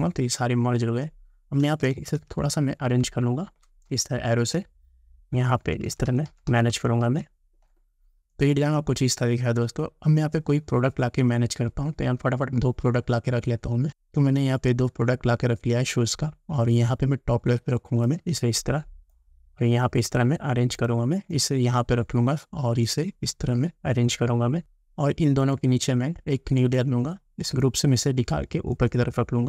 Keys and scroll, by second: 2.3 shift+Left, 3.9 Right.